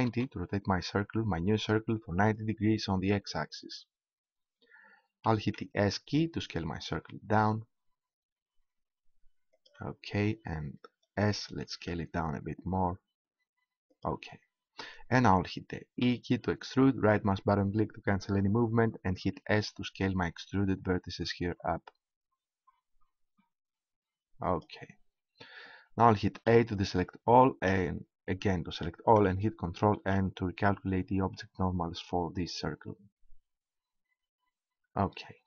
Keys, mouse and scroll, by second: 5.3 s, 9.6-11.4 drag, 11.6 s, 13.9-15.9 drag, 15.9 e, 17.3-19.0 right drag, 19.1 s, 24.6-26.3 drag, 26.4 a, 27.7 a, 30.0 ctrl+n, 33.3 Tab.